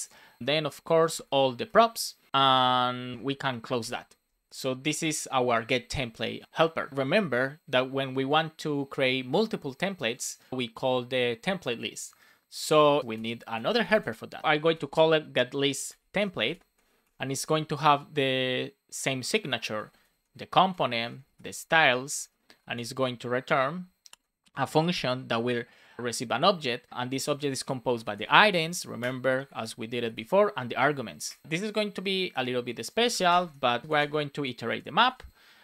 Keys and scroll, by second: 0.4 shift+9, 1.6 Return, 2.2 Right, 3.1 space, 3.7 super+s, 3.7 super+z, 4.4 super+z, 4.8 super+s, 6.4 Down, 6.9 Return, 13.1 Return, 13.4 space, 14.5 shift+l, 15.8 shift+t, 16.7 space, 17.2 shift+9, 19.7 shift+c, 20.6 Return, 21.0-23.0 typing, 21.9 Right, 24.0 Left, 24.3 Return, 27.8 BackSpace, 28.9 BackSpace, 28.9 Return, 30.7 Down, 31.2 Escape, 31.4 Down, 32.2 Return, 33.4 space, 34.9 shift+9.